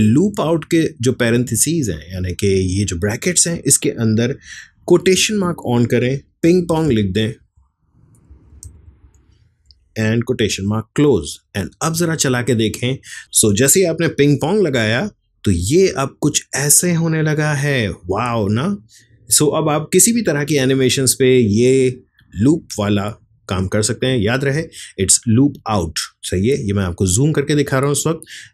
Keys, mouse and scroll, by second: 12.8 click, 13.4 space, 25.5 click.